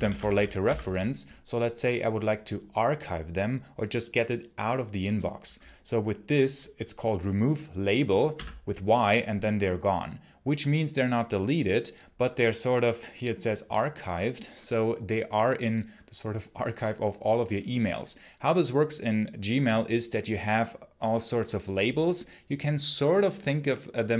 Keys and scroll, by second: 0.0-1.0 typing, 8.1 y.